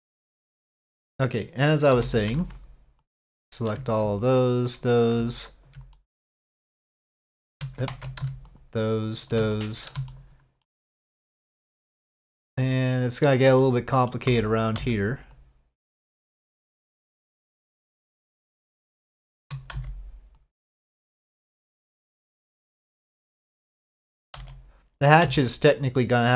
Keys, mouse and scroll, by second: 1.9 3, 2.3 alt+space, 2.4 alt+click, 3.1 alt+click, 4.2 shift+click, 5.3 alt+shift+click, 5.9 shift+middle click, 6.9 alt+shift+click, 7.9 ctrl+z, 8.5 alt+shift+click, 9.5 click, 10.1 shift+middle click, 12.7 shift+middle click, 13.6 middle click, 14.8 c, 19.0 shift+middle click, 19.7 c, 23.0 middle click, 23.6 shift+middle click, 25.2 d.